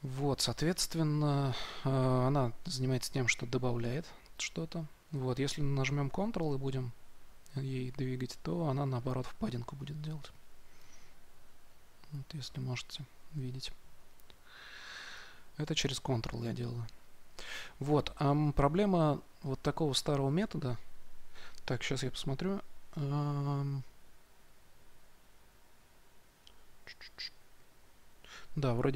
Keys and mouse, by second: 6.4-15.2 drag.